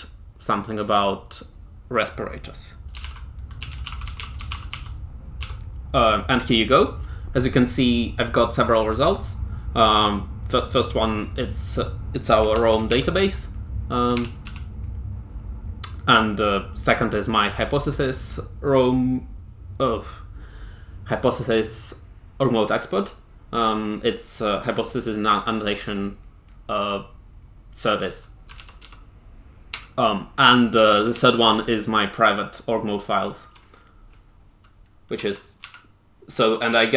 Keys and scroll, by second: 2.6-5.3 typing, 12.5 ctrl+j, 12.6 ctrl+j, 12.8 ctrl+k, 14.1 ctrl+j, 14.4 ctrl+k, 28.5 ctrl+j, 28.7 ctrl+j, 29.6 ctrl+j, 30.7 ctrl+j, 30.9 ctrl+j, 31.3 ctrl+j, 35.2 ctrl+j, 35.5 ctrl+k.